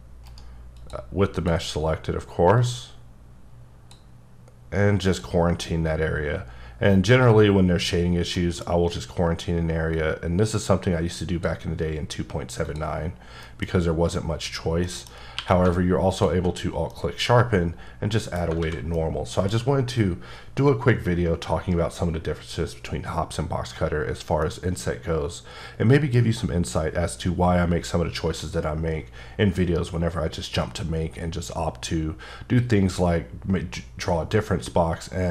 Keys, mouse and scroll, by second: 0.3 right click, 0.8 click, 1.3 click, 2.6 click, 5.1 click, 5.7-7.9 scroll up 3, 8.0 scroll down 3, 8.4 middle click, 8.6-9.9 scroll up 3, 9.9-11.5 drag, 12.1 scroll down 3, 12.6 click, 13.0-13.4 scroll up 3, 13.4 middle click, 13.7 scroll up 2, 14.4-14.9 scroll down 4, 14.9 middle click, 15.3 q, 16.1 alt+click, 16.6-16.9 alt+scroll down 3, 16.9 middle click, 18.4 scroll up 2, 18.6 alt+a, 19.0 middle click, 24.4 middle click.